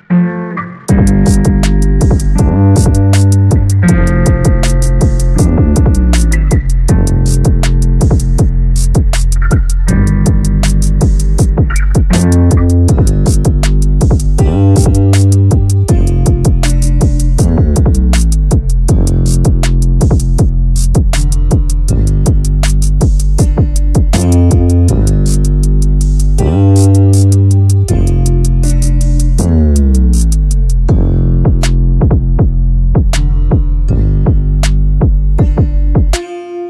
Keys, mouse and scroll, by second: 4.9 a, 5.1 a, 6.6 click, 7.6-8.7 drag, 14.6-16.7 drag, 16.7 a, 16.9 a, 17.3-17.8 shift+middle drag, 17.8-18.4 scroll up 1, 18.4-19.1 scroll up 7, 19.1 click, 19.5 Tab, 21.4 l, 22.0 l, 22.7 a, 22.8 a, 24.1 l, 25.2 a, 26.1 click, 27.6 middle click, 28.1-28.6 scroll up 6, 28.6-30.1 shift+middle drag, 30.1 l, 32.0 click, 33.0 click, 34.4-36.6 drag.